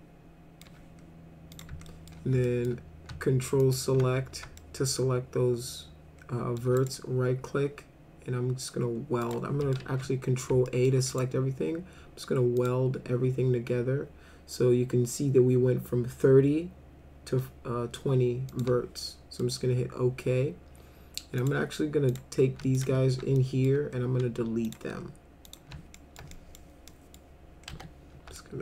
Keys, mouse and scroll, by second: 1.5 click, 1.9 alt+middle click, 2.4 alt+middle click, 3.6 ctrl+click, 4.6-6.6 alt+middle drag, 6.8 right click, 9.2 click, 9.6 ctrl+middle click, 9.8 ctrl+a, 10.7 alt+middle click, 11.1 right click, 12.6 click, 18.5 click, 19.0 alt+middle click, 21.4 click, 22.1 click, 22.8 ctrl+click, 23.4 alt+middle click, 24.7 ctrl+click, 25.4 ctrl+click, 26.0 alt+middle click, 26.3 middle click, 26.9 middle click, 27.7 F3, 28.4 alt+middle click.